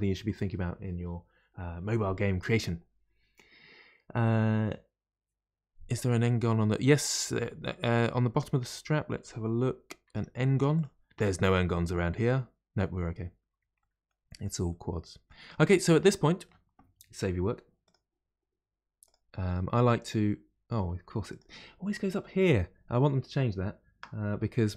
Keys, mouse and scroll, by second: 6.3 middle click, 7.2 Tab, 7.3-10.0 middle drag, 10.0 Tab, 10.5 Tab, 10.7 click, 11.0 Tab, 11.4-15.5 middle drag, 15.5-15.9 scroll down 1, 15.9-17.8 middle drag, 17.8-20.8 drag.